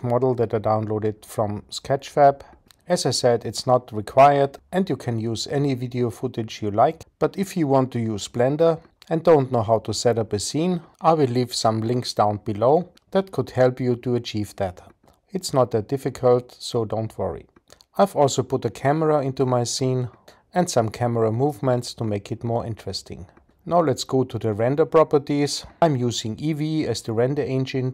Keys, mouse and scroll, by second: 3.2 click, 8.8 click, 16.0-19.6 drag, 25.7 click.